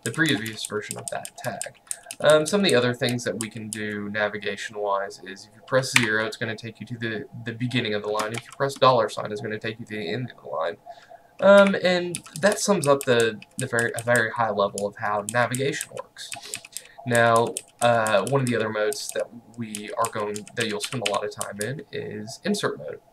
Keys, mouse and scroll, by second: 0.0-3.8 typing, 6.1 0, 8.4 shift+4, 11.7-22.2 typing.